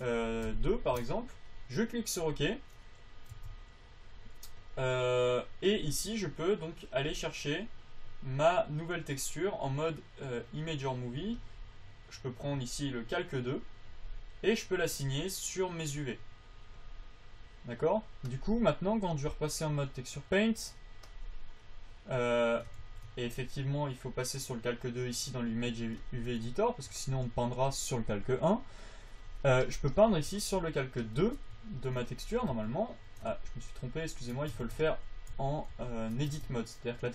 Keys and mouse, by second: 3.7 Tab, 7.3-10.9 drag, 11.7-14.9 drag, 15.3-17.1 drag, 23.2 ctrl+z, 28.6 f, 30.7-32.1 drag, 33.0 Tab, 33.7 ctrl+z, 34.2 ctrl+z, 34.6 ctrl+z, 34.9 Tab, 35.3 ctrl+z, 35.7 ctrl+z, 36.2 ctrl+z, 36.8 Tab.